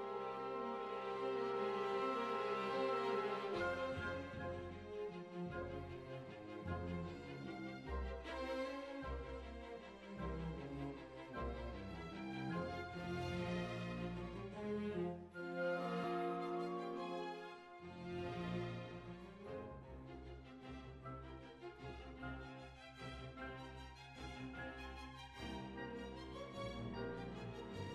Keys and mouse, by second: 0.2 click, 0.9-2.4 middle drag, 5.1 KP_7, 6.1 shift+a, 7.2 g, 7.8 s, 8.5 s, 9.2 z, 10.5-11.8 drag, 11.3 Tab, 13.2 g, 14.9 g, 16.6 g, 17.6 right click, 18.0 g, 19.4 ctrl+r, 19.9 click, 20.9 s, 21.8 ctrl+r, 22.2 right click, 23.0 right click, 24.1 click, 24.1 KP_1, 24.8 z, 26.8 a, 27.4 s.